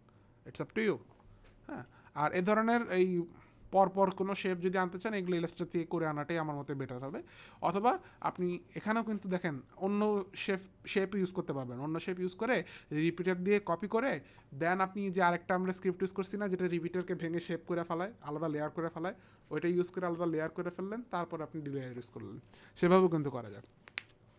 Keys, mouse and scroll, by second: 3.1 click, 24.3 Num_Lock, 24.3 Return.